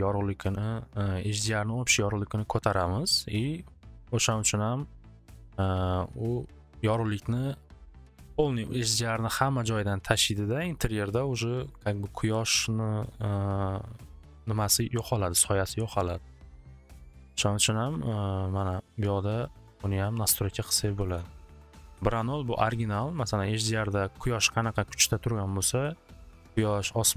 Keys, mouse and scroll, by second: 17.2-18.4 drag, 19.0 1, 19.4 click, 19.7 1, 20.4 click, 20.6 click, 20.8 click, 20.8 typing.